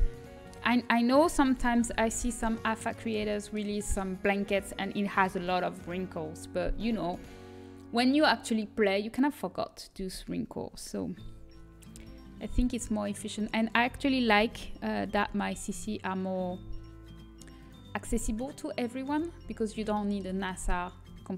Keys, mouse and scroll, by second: 0.4 a, 2.5 l, 13.3 s, 14.2 s, 18.0-19.7 middle drag.